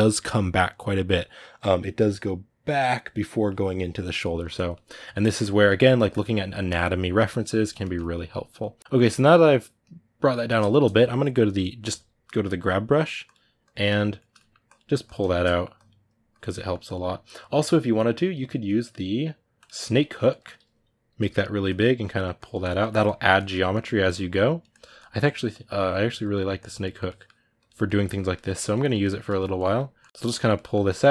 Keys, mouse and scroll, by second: 5.9-7.6 drag, 7.6-11.6 ctrl+middle drag, 11.6 g, 11.9 f, 13.4 click, 13.9 ctrl+middle click, 14.4 click, 15.0 ctrl+shift+middle click, 15.5 click, 16.3 middle click, 16.6-19.7 drag, 19.7-21.0 ctrl+middle drag, 21.0 f, 21.8-23.5 drag, 23.5 middle click, 24.3 click, 24.8-26.0 middle drag, 26.0 click, 26.6 middle click, 27.3 click, 27.6 ctrl+middle click, 28.5 click, 29.0 ctrl+middle click, 29.3 click, 30.0 ctrl+middle click, 30.1 click, 30.3 middle click, 30.6 click, 30.8 middle click.